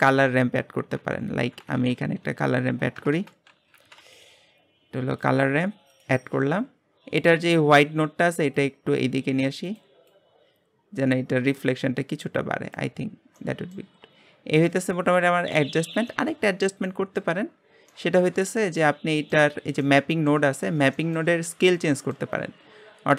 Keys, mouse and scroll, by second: 5.3 BackSpace, 6.9 scroll up 2, 8.0 scroll up 3, 9.7 click, 10.3-13.0 drag, 13.0 scroll down 3, 13.3-13.7 middle drag, 13.7 scroll up 1, 13.9-14.3 scroll down 5, 16.0 middle click, 16.5-16.9 scroll up 3, 16.9-23.1 shift+middle drag.